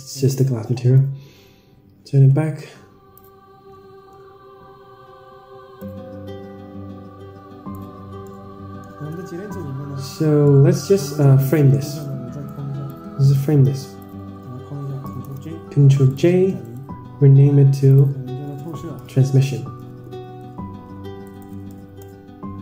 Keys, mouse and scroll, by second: 1.3-3.6 drag, 4.1 n, 6.2-8.0 drag, 8.5-9.2 middle drag, 9.5 Tab, 10.0-10.4 scroll down 6, 10.4-10.8 middle drag, 11.4 middle drag, 12.0-12.4 drag, 12.8-13.3 drag, 13.5 click, 15.2 ctrl+j, 16.6-22.4 right drag.